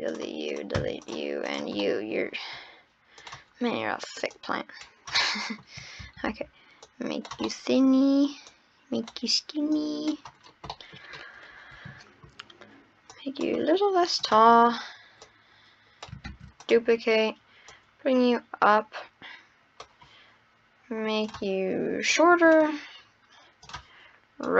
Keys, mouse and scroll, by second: 0.5 click, 1.5 drag, 1.7 scroll up 1, 1.8-2.3 middle drag, 2.3-3.2 scroll down 5, 3.2 click, 3.5-4.3 scroll up 5, 4.3 click, 5.2 middle click, 6.0 ctrl+z, 6.8 click, 7.5 middle click, 8.4 click, 9.7 click, 10.5 scroll down 9, 10.7 middle drag, 11.0 scroll up 5, 12.5-13.1 scroll up 6, 13.1 click, 14.2 click, 14.5-15.2 scroll down 1, 15.2 click, 16.3 shift+d, 17.7 click, 21.2 click, 23.6 click.